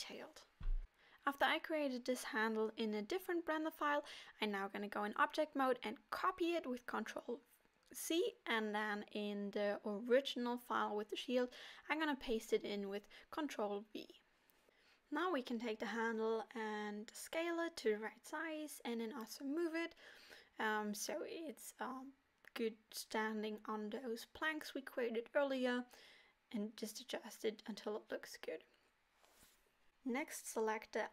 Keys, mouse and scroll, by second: 0.8 n, 3.0 click, 3.7 ctrl+c, 8.9 middle click, 10.8 ctrl+v, 11.3 middle click, 12.4 scroll up 2, 13.1 middle click, 13.1 scroll up 1, 14.5-15.1 scroll up 4, 15.4 middle click, 16.5 g, 18.3 right click, 19.1 click, 20.6 r, 23.9 g, 26.8-27.7 scroll down 9, 27.5 middle click, 29.7 middle click, 30.9-31.1 scroll up 4.